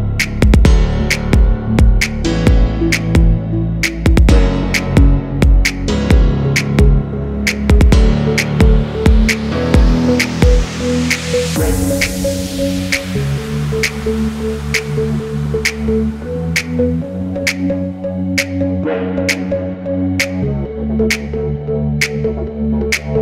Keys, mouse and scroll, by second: 1.7 alt+scroll up 1, 2.4 alt+scroll up 1, 4.6 shift+click, 5.5 alt+scroll down 1, 5.8 space, 5.8 double click, 6.1-6.6 alt+scroll down 1, 6.8 space, 9.1 alt+scroll up 1, 11.5 ctrl+g, 11.8 double click, 12.2 alt+scroll down 1, 13.3 alt+scroll down 1, 13.8 alt+scroll up 1, 17.8 space, 17.8 double click, 20.8 double click, 21.3 alt+scroll up 1, 22.8 shift+click.